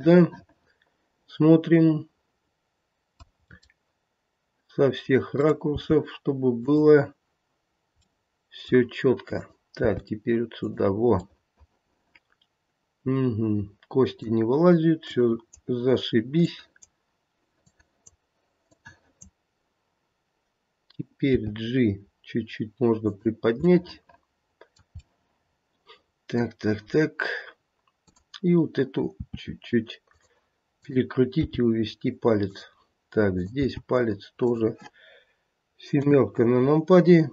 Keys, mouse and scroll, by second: 0.1 middle click, 0.2 middle click, 1.0 middle click, 3.4 middle click, 3.4 scroll up 3, 5.3 click, 5.6 g, 8.1 middle click, 9.3 click, 9.8 g, 11.2 middle click, 12.9 middle click, 15.1 click, 16.4 click, 18.6 click, 21.2 g, 23.8 middle click, 25.1 middle click, 26.9 scroll down 1, 28.0 click, 29.1 r, 30.8 click, 31.3 g, 33.3 click, 33.7 g, 35.9 KP_7, 36.6 scroll down 2.